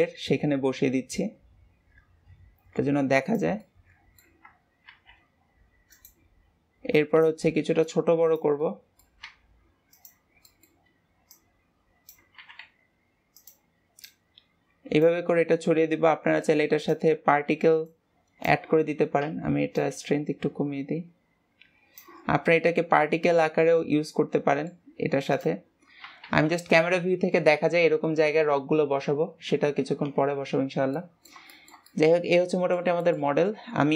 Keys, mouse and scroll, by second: 3.6-4.8 middle drag, 4.8 shift+d, 6.8 click, 7.8 click, 8.5-9.2 middle drag, 9.2 s, 10.4-11.2 middle drag, 11.2 click, 14.0 click, 15.3-16.4 middle drag, 16.4 click, 17.8 click, 19.7-22.2 drag, 22.2 scroll down 2, 22.5-25.2 middle drag, 25.2 click, 26.2 ctrl+s, 30.5-30.8 scroll down 2, 30.8-33.9 middle drag.